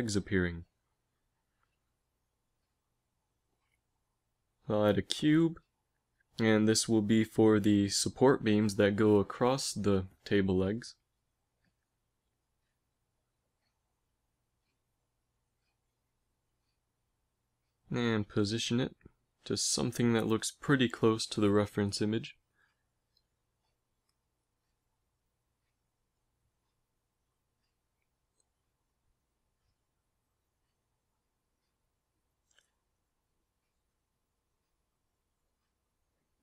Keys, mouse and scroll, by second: 1.1 KP_1, 1.4 z, 4.0 shift+a, 7.1 g, 8.2 z, 9.2 s, 11.8 g, 13.0 g, 14.7 KP_1, 15.3 z, 16.8 s, 18.4 g, 22.4 g, 27.4 g, 31.5 z, 32.4 s, 35.7 a.